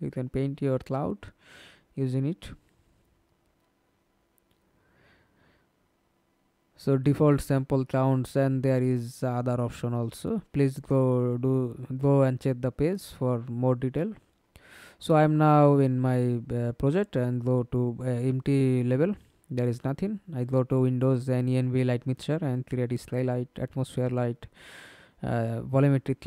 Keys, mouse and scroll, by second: 0.6-1.5 scroll down 11, 1.5-2.0 scroll down 4, 5.1-6.6 scroll down 20, 7.3 scroll up 1, 7.5-8.3 scroll down 7, 8.3-12.5 scroll down 13, 12.5 scroll down 2, 13.2 middle click, 16.4 double click.